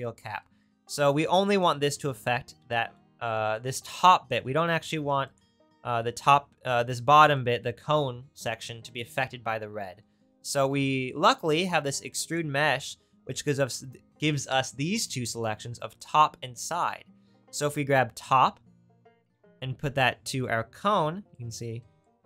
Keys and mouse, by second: 5.4-11.8 right drag, 11.9-13.3 drag, 16.5-19.0 drag.